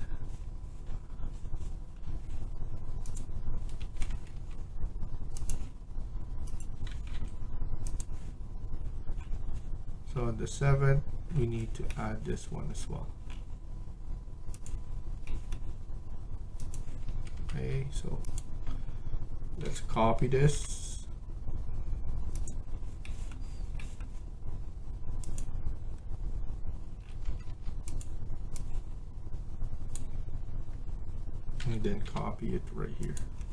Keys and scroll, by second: 3.7 Escape, 4.0 Escape, 4.2 Escape, 6.6-7.5 typing, 11.5-12.2 typing, 16.9 Escape, 17.3 Escape, 17.5 Escape, 19.5-20.5 typing, 26.9 Escape, 27.1 Escape, 27.4 Escape, 31.5-31.9 typing.